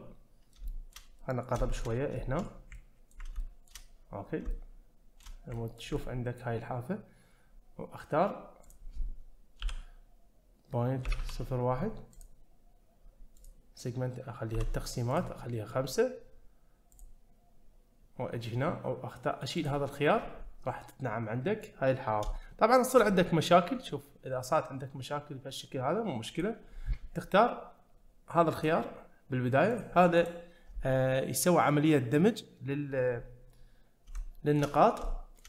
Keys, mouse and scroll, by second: 0.5-0.9 shift+middle drag, 1.2 middle click, 1.7 shift+scroll up 1, 1.8 shift+middle click, 2.2 shift+middle click, 2.8-3.1 ctrl+middle drag, 3.4 shift+middle drag, 4.0-4.4 scroll up 1, 4.5-5.3 shift+middle drag, 5.5 ctrl+middle click, 6.0 middle click, 8.6-12.3 drag, 13.3-15.3 drag, 16.9 click, 19.7 click, 20.4 scroll down 1, 20.8-21.6 middle drag, 22.3-22.9 shift+middle drag, 23.2-26.0 scroll down 1, 26.3 click, 28.7 click, 30.3 click, 34.2-34.6 shift+middle drag, 34.6 shift+scroll down 1, 35.0-35.4 shift+middle drag.